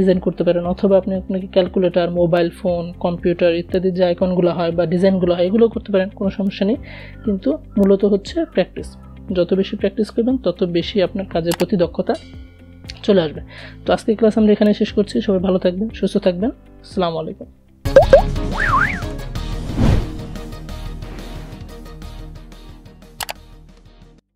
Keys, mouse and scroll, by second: 8.3 click.